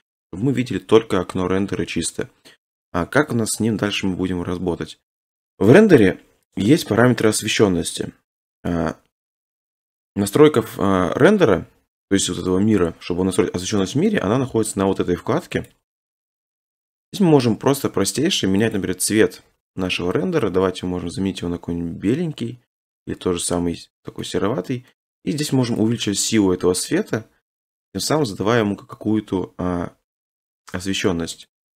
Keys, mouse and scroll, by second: 2.2 middle click, 3.5 middle click, 3.7 middle click, 5.1 middle click, 9.5-10.2 scroll, 14.1-15.7 scroll, 15.7 click, 18.7 click, 24.2 click, 24.9 middle click, 26.2 scroll, 31.0 click, 31.5 click.